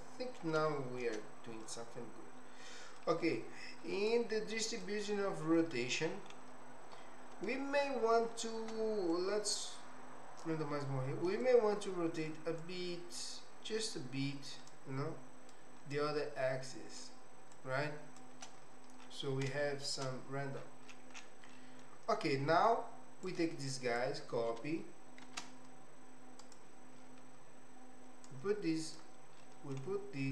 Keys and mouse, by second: 0.7 shift+middle click, 1.6-3.0 middle drag, 4.1 click, 5.5 middle click, 9.1-10.6 drag, 11.4 shift+click, 12.6-14.1 shift+drag, 14.7 shift+click, 15.9-17.1 shift+drag, 17.5 shift+click, 19.6 shift+middle click, 21.5 middle click, 23.3 click, 25.3 shift+d, 28.4 click, 29.4 middle click.